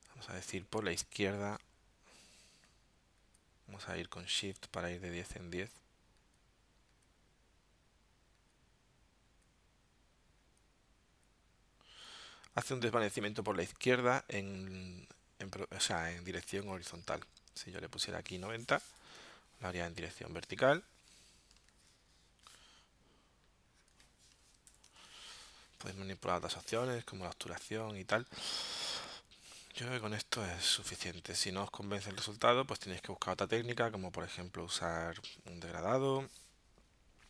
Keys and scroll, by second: 18.9 9, 19.2 Tab, 21.7 super+z, 24.7 0, 24.8 Tab.